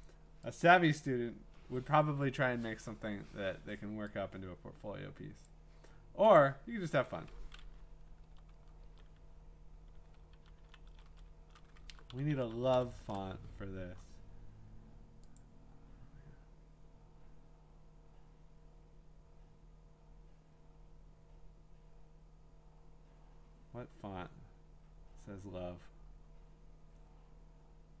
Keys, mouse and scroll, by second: 0.6-3.7 drag, 5.4 click, 6.4 click, 8.2 Down, 8.8 Right, 10.3 Down, 10.6 Down, 10.9 Right, 11.5 Up, 11.9 ctrl+shift+Left, 12.1 ctrl+shift+Left, 12.3 ctrl+shift+Left, 12.5 ctrl+shift+Left, 12.7 ctrl+shift+Left, 15.4 click, 16.0-18.4 drag, 24.3-25.7 scroll, 26.1 scroll.